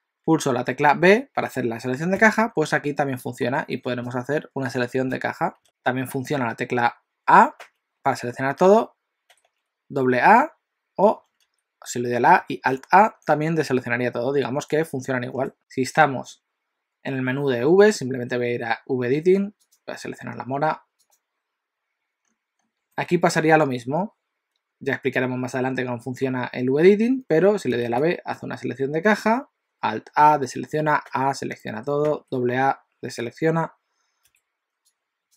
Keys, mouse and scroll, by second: 2.2 b, 5.6 click, 5.6 x, 7.5 a, 9.3 a, 9.5 a, 11.5 a, 12.8 alt+a, 15.5 ctrl+right click, 19.7 click.